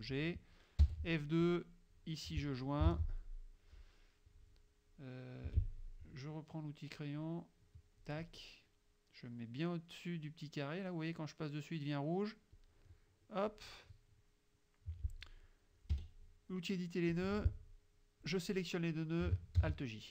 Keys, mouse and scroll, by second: 0.9 F2, 1.5 click, 3.0 shift+j, 5.5 F6, 7.3-8.3 drag, 12.6-13.8 drag, 16.0 F2, 17.2-18.5 drag, 19.7 alt+j.